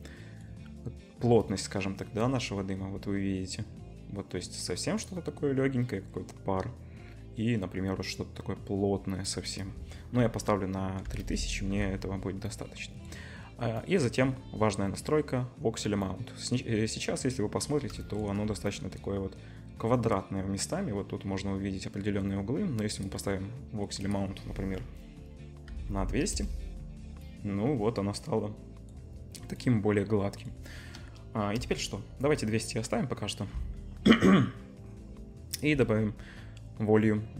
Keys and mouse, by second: 26.0 0, 31.3 KP_0.